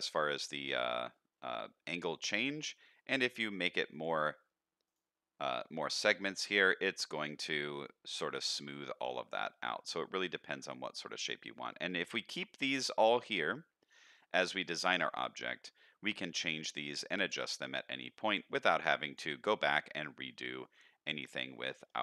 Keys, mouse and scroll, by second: 0.1 middle drag, 0.7-1.1 middle drag, 2.0-2.5 middle drag, 3.5 click, 3.9 click, 4.8 click, 5.8 click, 6.5-10.3 shift+drag, 10.6-11.2 middle drag, 11.7 middle click, 12.7 click, 14.1 middle click, 14.9 middle drag, 15.8-16.1 middle drag, 17.1 click, 17.8-19.2 shift+drag, 19.4-19.8 middle drag, 20.2-20.7 middle drag, 21.0 middle drag, 21.8-22.0 middle drag.